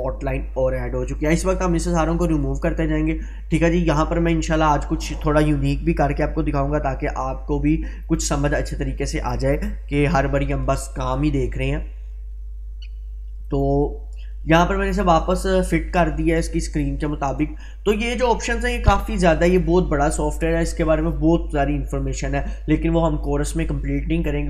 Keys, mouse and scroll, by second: 2.4 click, 8.1 click, 13.5 click.